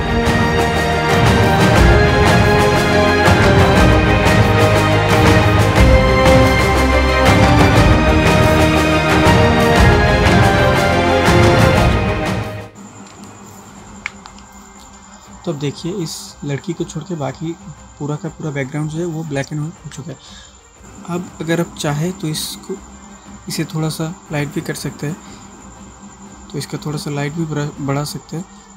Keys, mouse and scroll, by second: 0.1 alt+right click, 0.5 click, 0.8-1.2 alt+right click, 1.8-3.2 drag, 4.1 click, 5.7 shift+click, 10.1 click, 11.6 ctrl+space, 12.1-12.5 ctrl+space, 14.0 ctrl+space, 24.2 click, 28.6 click.